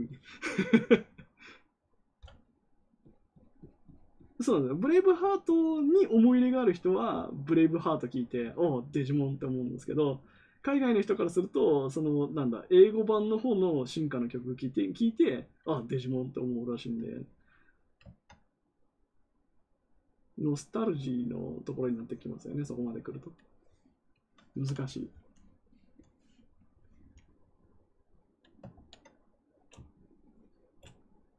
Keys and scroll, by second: 28.7 ctrl+z.